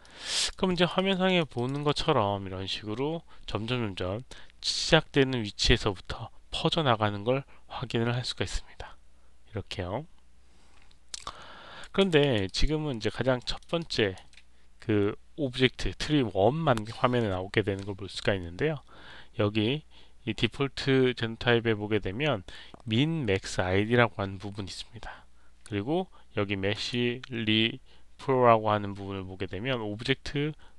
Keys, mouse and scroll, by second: 0.3 alt+right click, 0.6 alt+click, 0.9 alt+right click, 1.0 alt+click, 1.2 alt+middle click, 1.5 alt+click, 1.6 alt+right click, 2.6-11.7 drag, 12.1 alt+click, 12.4 alt+right click, 13.3 alt+middle click, 13.7 alt+click, 26.6 click.